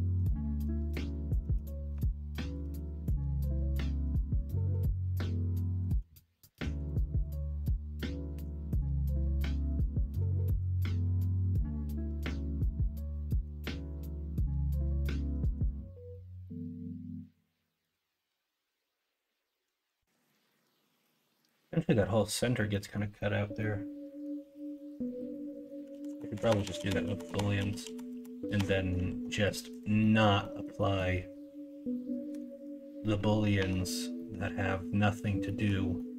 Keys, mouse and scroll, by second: 0.4 2, 1.6 alt+middle click, 2.8 middle click, 3.2 middle click, 3.5 shift+middle click, 4.3 middle click, 5.5 shift+middle click, 7.0 middle click, 7.4 middle click, 8.3 ctrl+e, 9.2 middle click, 9.8 middle click, 10.2 alt+z, 11.1 alt+z, 11.9 middle click, 13.1 middle click, 14.3-15.5 middle drag, 16.6-17.9 middle drag, 20.2 middle click, 21.4 middle click, 22.7 middle click, 23.5 middle click, 24.7 middle click, 25.9-28.5 ctrl+z, 28.6 ctrl+middle click, 29.2 middle click, 30.0 middle click, 30.4 middle click, 30.7 middle click, 32.3 /, 33.6 Tab, 34.1 middle drag, 35.4 middle drag, 35.9 middle drag.